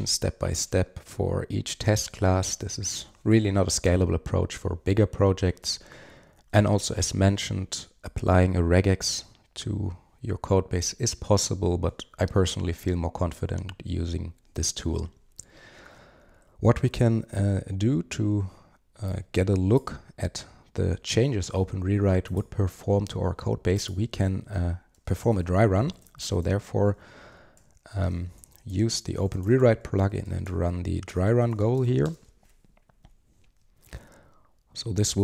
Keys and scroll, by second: 0.2 super+v, 5.6 super+z, 17.2 alt+F12.